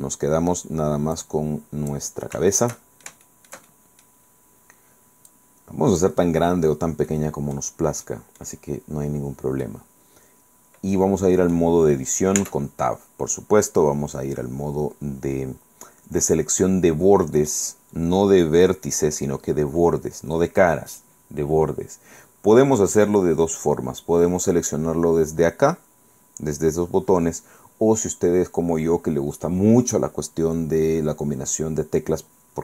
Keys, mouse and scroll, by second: 0.0 right click, 1.3 click, 2.2 scroll down 1, 2.6-4.4 shift+middle drag, 4.6 scroll up 1, 5.4 click, 7.2 click, 8.2 click, 9.8-11.8 drag, 12.5 Tab, 16.4-17.8 middle drag.